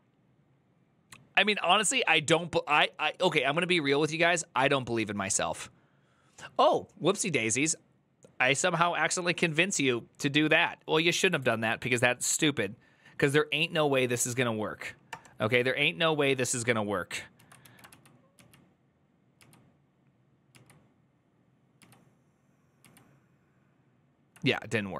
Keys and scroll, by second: 11.3 alt+{, 17.1 Return, 17.1 ctrl+a, 17.4 [, 17.6 ctrl+u, 18.1 ctrl+u, 20.3 ctrl+u, 24.3 ctrl+u, 24.3-24.9 typing.